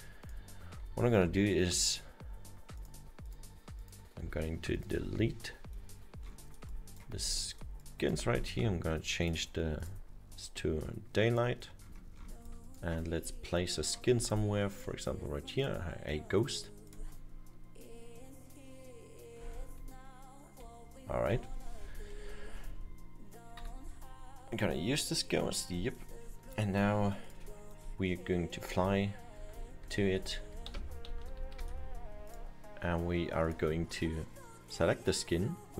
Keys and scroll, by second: 1.0 Delete, 4.4 Return, 19.8 Up, 22.6 Right, 23.6 Escape, 28.6 Up, 29.9 Up, 30.8 Down, 31.8 Up.